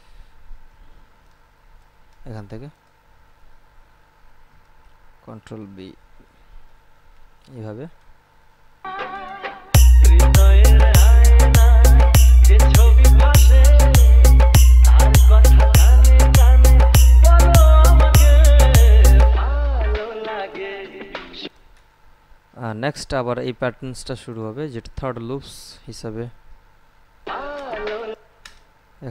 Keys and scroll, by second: 5.5 ctrl+b, 9.0 space, 21.6 space, 27.5 space.